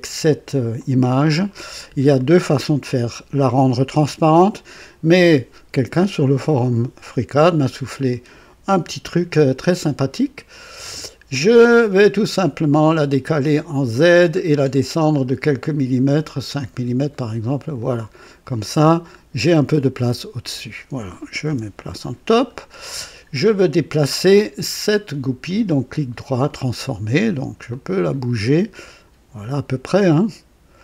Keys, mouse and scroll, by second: 0.7 click, 7.8 right click, 9.6 click, 11.5 click, 12.1 click, 13.8 click, 14.4-15.2 scroll down 3, 16.1 scroll up 2, 17.7 click, 18.4 click, 19.0-20.7 drag, 21.4 KP_2, 22.1 scroll up 1, 24.6 click, 25.4 right click, 26.4 click, 27.6-29.8 drag, 30.7-30.8 drag.